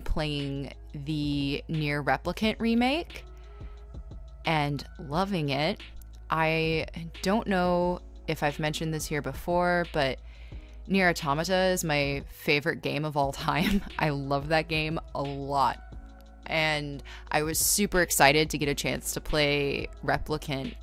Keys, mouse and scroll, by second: 0.0-0.3 typing, 2.7-4.7 typing, 5.5 scroll, 5.8-6.8 typing, 7.9 scroll, 12.5 scroll, 13.7 ctrl+z, 14.2 ctrl+z, 14.9 scroll, 15.5 scroll, 15.9-18.0 typing, 19.8-20.8 typing.